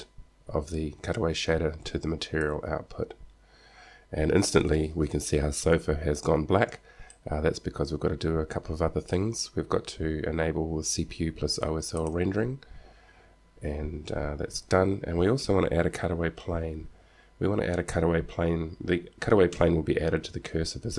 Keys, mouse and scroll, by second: 7.2-9.2 drag, 13.7 click, 19.7 KP_1, 19.9 KP_1.